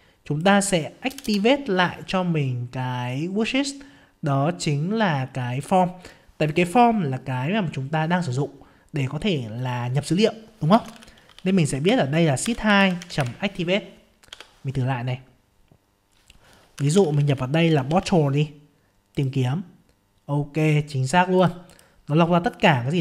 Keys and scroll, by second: 14.3 F5.